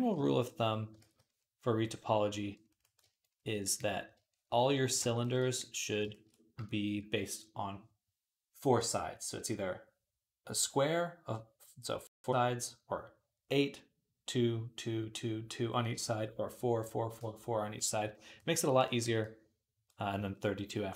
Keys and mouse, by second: 0.0 i, 0.9 ctrl+z, 2.9-5.4 shift+drag, 18.8-20.0 ctrl+drag.